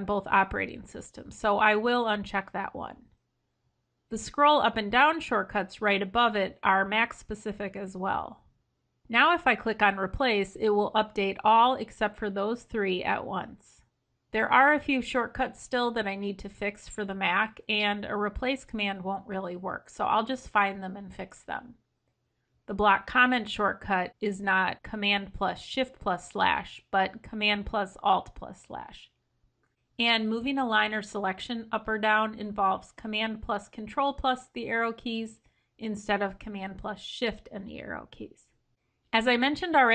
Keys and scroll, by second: 20.4 ctrl+f, 24.5 ctrl+Left, 26.3 ctrl+b, 29.8 ctrl+f, 33.7 ctrl+b, 36.5 ctrl+b.